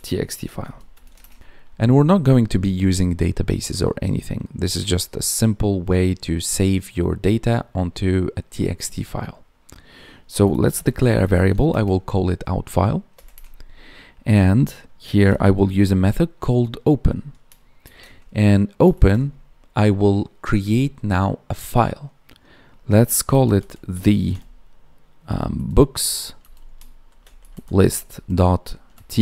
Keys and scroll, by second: 1.1 space, 1.4 ctrl+s, 11.6 space, 13.2 space.